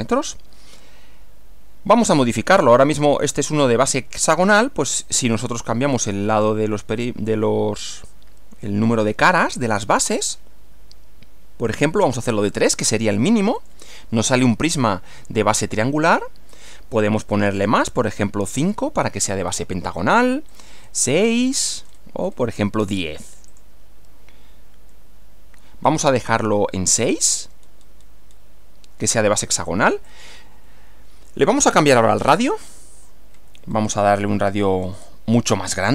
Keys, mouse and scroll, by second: 5.2 click, 6.0-6.6 scroll down 2, 13.6 click, 14.9-16.0 middle drag, 16.5 click, 17.0 scroll up 2, 17.6 scroll up 1, 18.6 click, 19.4-20.2 middle drag, 20.5 click, 21.2 scroll up 2, 21.3 scroll down 2, 21.4-22.5 scroll up 6, 22.8 scroll down 2, 23.5 click, 24.9-26.6 middle drag, 27.2 click, 27.6-28.2 scroll down 1, 28.3 scroll down 1, 30.1 click, 32.7 click, 33.3-34.2 scroll up 2, 34.4 scroll up 2, 34.6 scroll down 1, 34.8-35.2 scroll up 1, 35.5 scroll up 2.